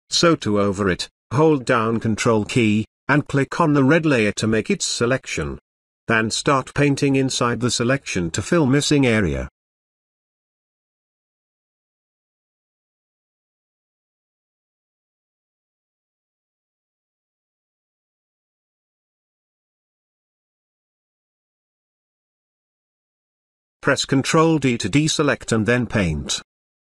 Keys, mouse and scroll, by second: 3.8-5.1 drag, 6.3-7.4 typing, 8.0-10.2 drag, 17.3 space, 17.6-18.5 ctrl+drag, 23.9 ctrl+d, 25.3-26.4 typing.